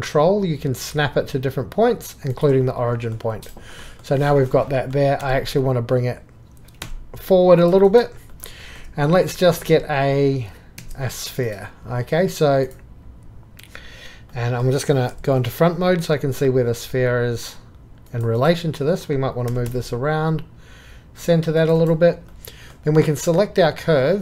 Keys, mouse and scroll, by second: 6.8 y, 13.0-14.3 drag, 15.1 KP_1, 19.0 click, 19.5 g, 23.0 2.